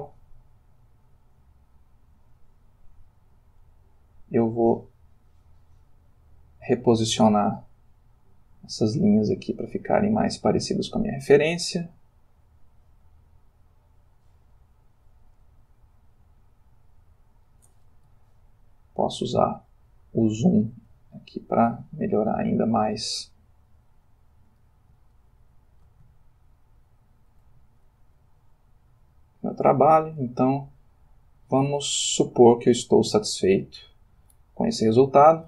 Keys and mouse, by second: 0.1 f, 1.1 click, 2.0-3.8 drag, 4.4-5.6 drag, 6.4-7.6 drag, 7.8-8.9 drag, 9.1 click, 10.5-11.5 drag, 11.9 click, 13.7-15.6 drag, 16.1-17.4 drag, 18.4-19.5 ctrl+middle drag, 19.8-20.8 shift+middle drag, 21.1-23.2 ctrl+middle drag, 24.1 click, 25.1 ctrl+middle click, 26.6-27.6 shift+middle drag, 28.1-30.1 drag, 31.1-32.6 drag, 33.2-34.4 drag.